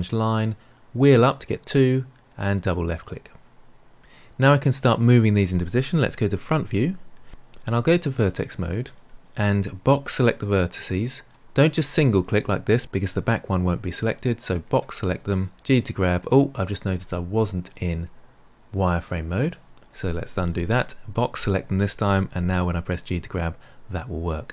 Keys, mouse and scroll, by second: 6.4 KP_1, 8.4 click, 9.1 click, 9.9 click, 11.2 drag, 11.7 click, 12.2 g, 14.5 click, 15.5 g, 18.7 click, 20.4 ctrl+z, 21.1 click, 22.2 g.